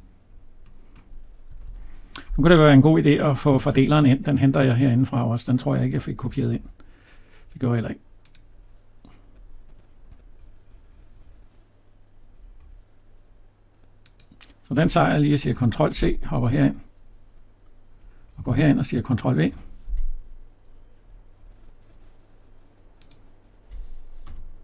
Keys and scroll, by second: 1.3 Escape, 15.4 ctrl+c, 19.2 ctrl+v.